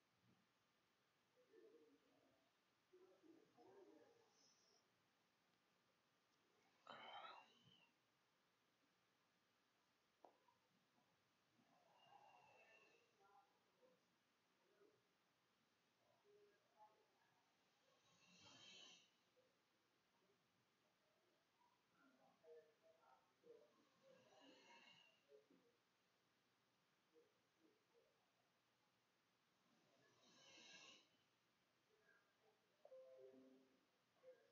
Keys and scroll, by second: 0.3 Home, 1.2-3.4 typing, 5.0 ctrl+shift+z, 5.2 ctrl+shift+s, 7.5 4, 16.4 typing, 16.7 Return, 17.6 Return, 20.3-24.6 typing, 28.2 Escape, 28.3 Tab, 32.1 ctrl+shift+z, 32.2 ctrl+shift+s, 34.2 2.